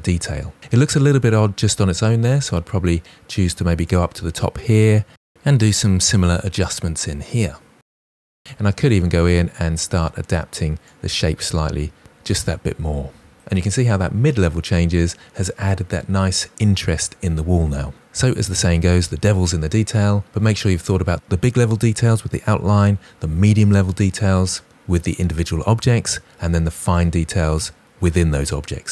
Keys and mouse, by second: 3.7 click, 5.1-10.0 typing, 5.4 click, 5.6 click, 6.3 Return, 8.3 click, 8.7 click, 9.0 Tab, 9.2-9.5 drag, 9.2-9.5 middle drag, 9.8 drag, 10.3 click, 13.1 Tab.